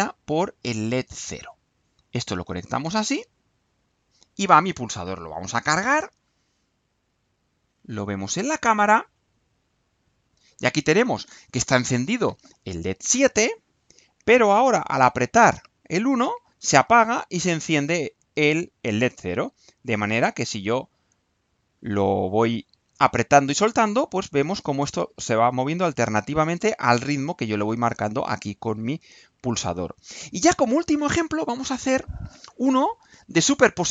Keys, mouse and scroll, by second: 0.8-2.4 drag, 3.0 click, 5.6 click, 8.7 click.